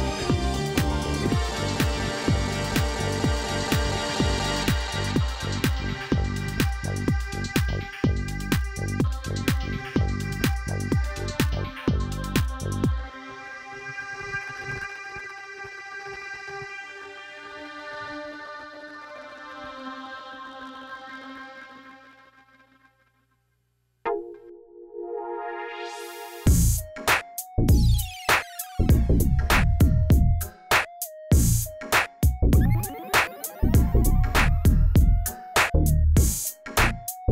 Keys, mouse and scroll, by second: 0.5 ctrl+r, 3.1 ctrl+r, 4.9 ctrl+r, 7.1-8.3 middle drag, 8.3 ctrl+r, 10.4-11.5 middle drag, 11.5 Tab, 11.8 click, 12.0 scroll down 7, 12.4-14.1 middle drag, 14.1 KP_1, 14.5-15.9 scroll down 3, 16.2 ctrl+KP_1, 16.8-17.5 middle drag, 17.5 scroll up 2, 17.8-18.3 scroll down 3, 18.3 shift+a, 20.6 r, 22.1 s, 23.0 g, 24.1-24.7 scroll up 9, 24.8 s, 25.7 g, 26.8 g, 28.2 s, 29.2 g, 31.6 drag, 32.9-33.9 drag, 34.6-36.1 middle drag, 36.2 Tab, 36.4-37.0 scroll up 5, 37.2 ctrl+r.